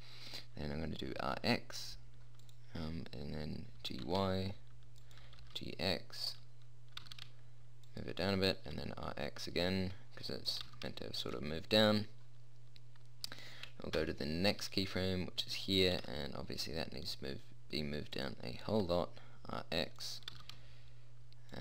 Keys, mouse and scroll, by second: 1.4 r, 4.1 g, 5.6 g, 7.3 g, 8.9 r, 10.9 g, 14.3 Up, 16.3 g, 18.9 r, 20.6 g.